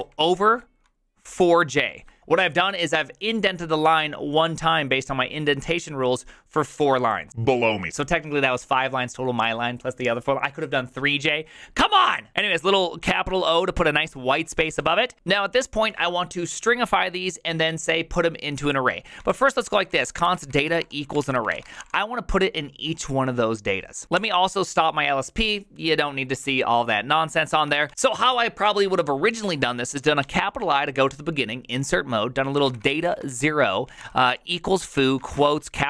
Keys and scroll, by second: 0.0 shift+., 1.2 4, 1.6 j, 12.5 shift+o, 14.8 ctrl+c, 19.0-22.2 typing, 23.8-24.5 typing, 27.7 ctrl+c, 27.9 j, 30.2 shift+i, 32.5-35.8 typing, 35.2 ctrl+c.